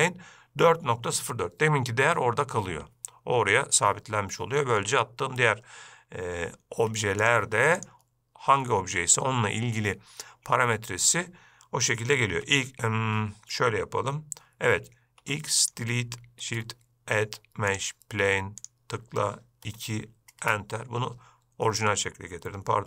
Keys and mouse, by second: 0.0 shift+a, 7.0 x, 8.0 click, 12.5 x, 15.4 x, 16.6 shift+a, 18.9-21.8 drag.